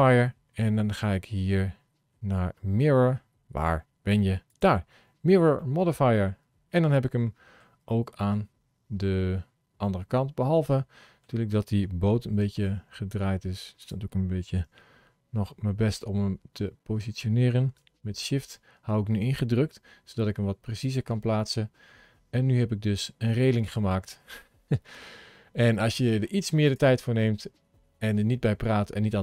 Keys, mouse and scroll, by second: 5.4 middle click, 7.7 scroll down 2, 8.1 middle click, 12.6 r, 14.6 g, 21.2 middle click, 26.5 click, 27.0 middle click.